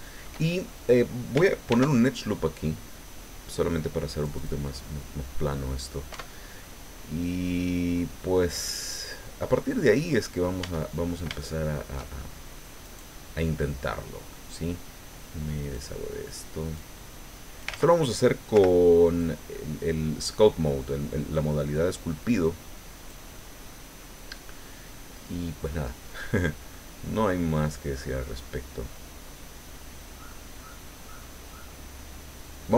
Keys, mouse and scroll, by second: 0.5 shift+middle click, 1.7 ctrl+r, 2.1-4.6 ctrl+drag, 5.1 scroll down 2, 5.5 middle click, 6.1 Tab, 6.6-8.5 middle drag, 8.6-10.6 middle drag, 10.6 Tab, 10.9-11.4 scroll up 3, 11.4 shift+middle click, 11.4 shift+click, 12.8 right click, 13.6 middle click, 15.6 click, 16.7-17.8 drag, 17.7 ctrl+z, 18.5 o, 19.2-23.2 drag, 23.3 middle click, 23.3-25.8 drag, 25.9-26.6 scroll down 3, 26.7-30.4 middle drag, 30.5-31.0 scroll up 2, 31.1-32.7 middle drag.